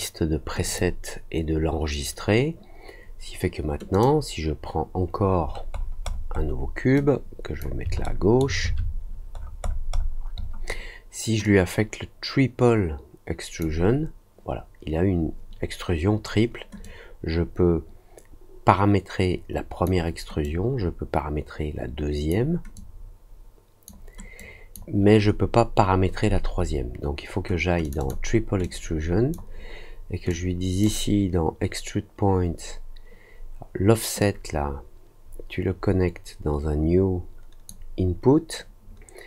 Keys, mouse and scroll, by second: 0.6 click, 3.9 click, 5.4 scroll up 1, 5.7-6.2 scroll down 2, 6.9 click, 8.0 alt+middle click, 9.3-9.9 scroll down 3, 9.9 middle click, 10.3 middle click, 11.4-13.5 drag, 16.8-19.8 drag, 20.4-22.2 drag, 22.7-23.8 drag, 24.3 click, 27.8 click, 27.9 click, 28.6 click, 30.2 click, 34.1-37.6 drag.